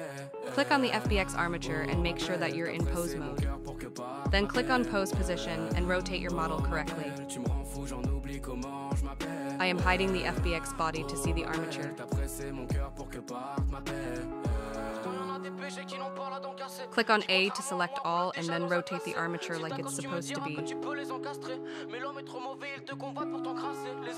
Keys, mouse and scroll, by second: 0.0-1.1 drag, 2.6 click, 3.6 click, 8.1 click, 8.6-9.4 scroll down 10, 10.6 click, 11.0 click, 11.4 click, 12.1 click, 12.5 click, 13.0 click, 13.4 click, 13.8 click, 14.3-16.0 scroll up 15, 16.0 click, 17.3 ctrl+z, 17.8 a, 18.5-18.9 scroll down 3, 19.0 scroll up 2, 20.5 click, 23.4-24.1 drag.